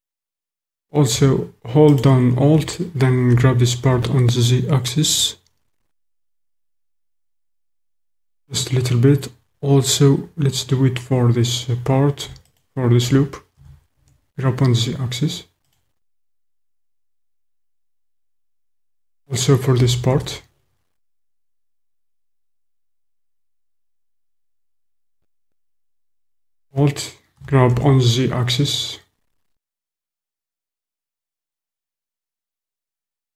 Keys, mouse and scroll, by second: 1.9 alt+click, 3.3 g, 3.9 z, 7.9 click, 12.5 alt+click, 13.5 g, 14.0 z, 15.7 click, 19.7 g, 20.3 z, 23.9 click, 27.3 g, 27.8 z, 31.7 click.